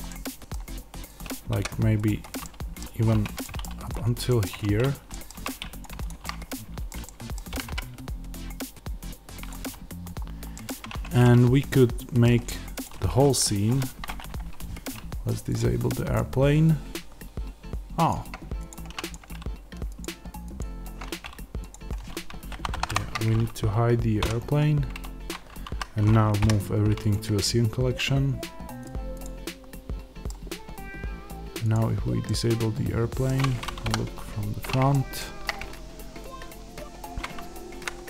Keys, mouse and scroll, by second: 0.0-1.2 middle drag, 1.2 click, 1.4 x, 2.4-3.7 middle drag, 2.9 scroll up 2, 3.1 Tab, 3.7 click, 4.2-5.7 middle drag, 4.4 Tab, 5.2 3, 5.9 shift+click, 6.1-9.4 shift+middle drag, 7.4 g, 9.4 click, 9.6-10.5 scroll, 10.5 middle click, 10.8 Tab, 11.1-12.7 middle drag, 12.7 click, 18.8 ctrl+z, 19.0 click, 24.1 h, 25.6 a, 27.0 m, 28.7-30.2 drag, 30.2-31.5 middle drag, 31.5 click, 32.2-37.1 middle drag, 33.7 KP_1, 34.4-34.8 scroll up 1, 37.1 click, 37.3 z.